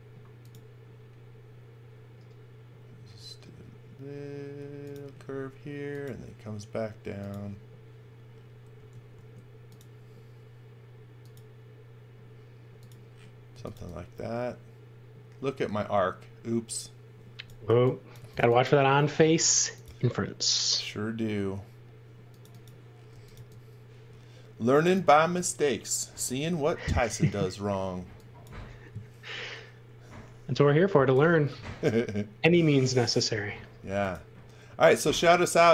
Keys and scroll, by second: 8.7 space, 9.1 a, 13.2-14.2 typing, 17.6-19.1 typing, 22.8-23.8 typing, 26.3 l, 27.9 e, 31.5 l.